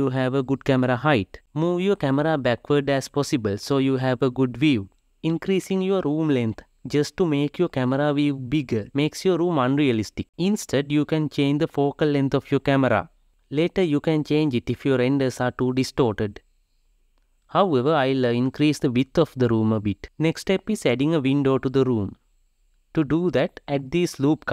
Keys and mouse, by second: 1.4 g, 10.5 click, 12.7-15.8 drag, 17.2 click, 17.5 n, 18.7 click, 19.0 click, 20.5 click, 21.0 Tab, 22.4 ctrl+r.